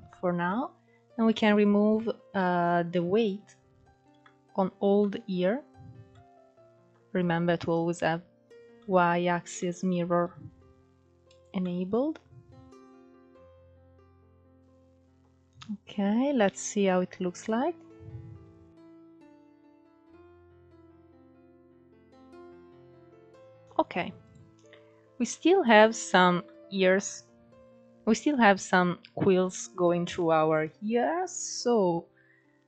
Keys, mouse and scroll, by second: 1.2-3.5 drag, 3.5-4.6 middle drag, 4.6-5.1 scroll up 1, 5.1 scroll down 3, 5.4-7.7 middle drag, 7.7 scroll up 2, 8.0 middle click, 8.6 scroll up 1, 8.8 shift+middle click, 9.4-10.9 drag, 10.9 middle click, 11.5-12.0 scroll up 2, 12.0 click, 12.9 middle click, 13.1 click, 13.5 middle click, 13.7 click, 13.9-14.3 scroll down 5, 14.0 middle click, 14.3-15.7 middle drag, 15.7 click, 16.3 scroll up 2, 16.6-17.7 middle drag, 17.7-18.6 scroll up 4, 18.6-20.5 drag, 20.5 scroll down 4, 20.7-23.5 middle drag, 23.5-25.7 drag, 25.7-26.5 middle drag, 26.5-28.4 scroll up 4, 28.7-30.5 middle drag, 30.5-32.0 scroll down 8, 32.0-32.6 scroll down 2.